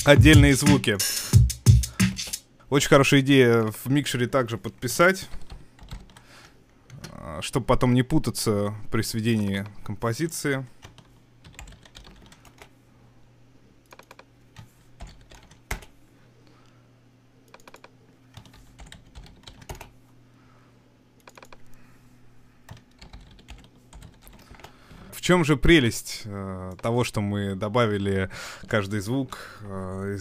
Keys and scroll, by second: 5.3-5.9 typing, 11.4-12.1 typing, 12.5 Return, 15.1 typing, 15.7 Return, 18.5-19.5 typing, 19.7 Return, 23.0-24.3 typing, 24.5 Return, 25.0 super+s, 26.0 super+2.